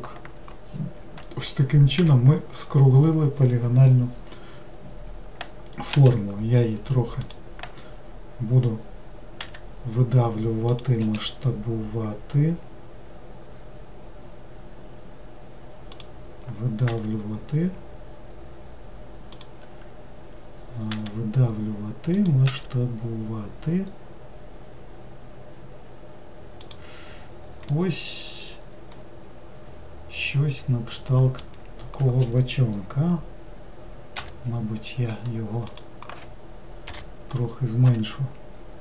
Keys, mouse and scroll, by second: 2.0 n, 5.9 s, 9.4 e, 11.0 s, 16.9 e, 20.9 e, 22.5 s, 27.2-27.7 scroll down 1, 27.7-30.8 middle drag, 35.7 click, 37.9 s.